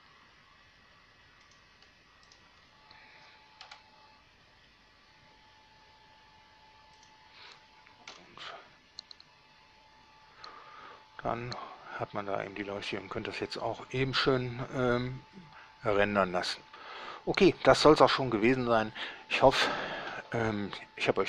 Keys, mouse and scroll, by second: 1.7 click, 2.5 right click, 3.9 7, 4.8 g, 7.3 drag, 8.4 F12.